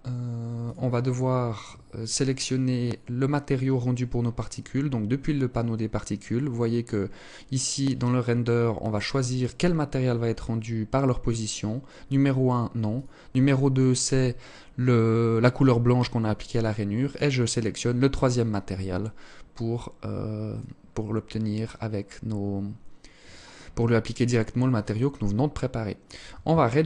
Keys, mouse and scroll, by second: 1.6-1.9 scroll up 4, 2.7 scroll up 4, 12.0 click, 16.2 click, 19.6-21.6 scroll up 4, 21.8 scroll up 1, 25.6 shift+click.